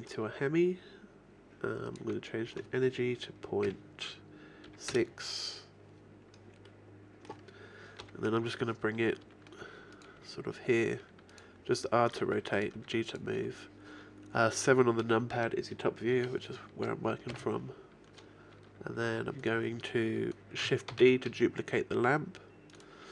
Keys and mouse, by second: 0.0-1.8 drag, 3.1-4.3 drag, 6.7 click, 7.0-8.0 middle drag, 8.0 KP_7, 9.2 r, 10.2 g, 12.2 r, 12.8 g, 17.4 KP_1, 21.0 shift+d, 23.0-23.1 drag.